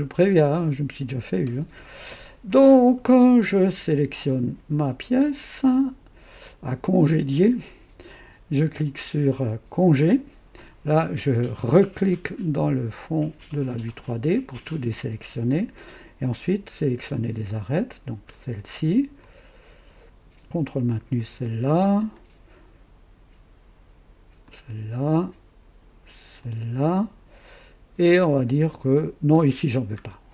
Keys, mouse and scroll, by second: 2.9 scroll up 1, 3.7 click, 3.8 right click, 4.9 click, 9.7 click, 13.3 click, 18.2 click, 19.2 click, 20.9 ctrl+click, 21.7 ctrl+click, 22.3 ctrl+right click, 24.4 ctrl+click, 26.4 ctrl+click, 30.0-30.3 scroll down 2.